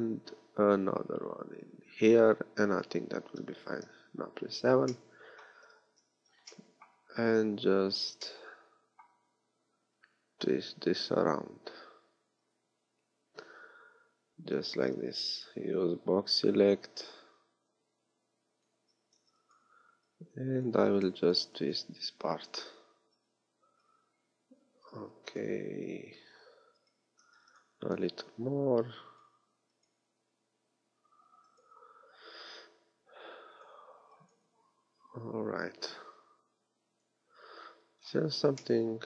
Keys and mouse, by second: 3.8 KP_7, 5.8 a, 14.9 b, 18.8 a, 19.1 b, 20.7 a, 21.3 b, 24.1 a, 24.9 b, 27.1 a, 27.3 b, 29.3-31.2 typing, 33.7 a, 34.0 b, 37.5 a, 38.1 z.